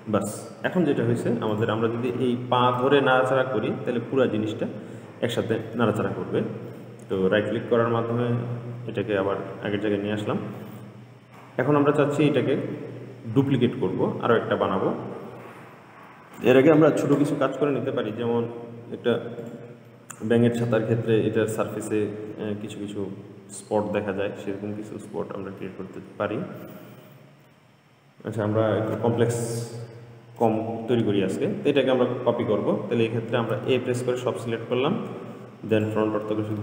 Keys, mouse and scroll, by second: 0.9 click, 1.8 click, 3.0 g, 7.0-10.0 middle drag, 10.2-10.8 scroll down 1, 10.8-13.9 middle drag, 17.7-18.4 scroll up 3, 18.4-19.7 middle drag, 19.7 click, 20.1-23.2 middle drag, 25.9-29.0 middle drag, 33.8 a, 34.8-35.2 scroll down 3, 35.9 click.